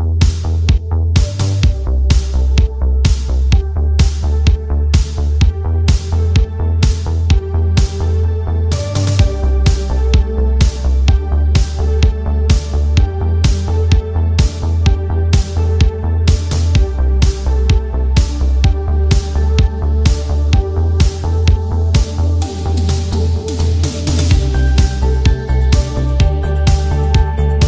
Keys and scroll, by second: 7.9 ctrl+z, 9.9 ctrl+z, 13.0 ctrl+z.